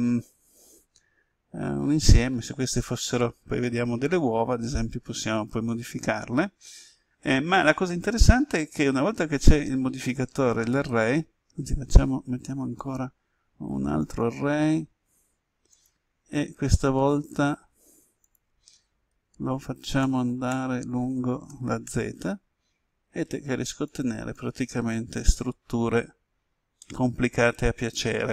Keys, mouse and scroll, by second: 12.7 click, 19.0 0, 20.0 Tab, 21.4 1, 21.8 Tab, 23.8 click, 26.2-26.7 scroll down 1, 26.7-28.3 middle drag.